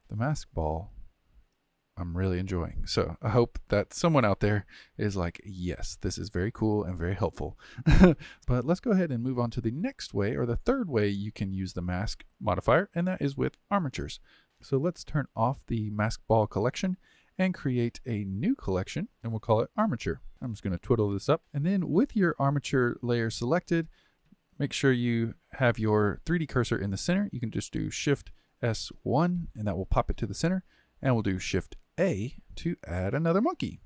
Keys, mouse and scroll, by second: 0.0 g, 4.4-8.4 middle drag, 13.9 click, 16.1 click, 18.4-19.1 drag, 20.3 click, 21.1 click, 28.5 shift+s, 31.8 shift+a.